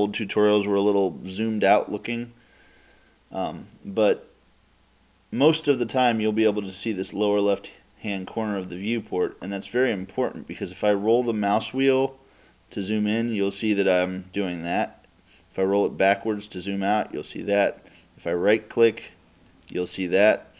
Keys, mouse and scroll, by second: 12.6-14.8 middle drag, 15.9-18.1 middle drag, 19.4-20.5 right drag.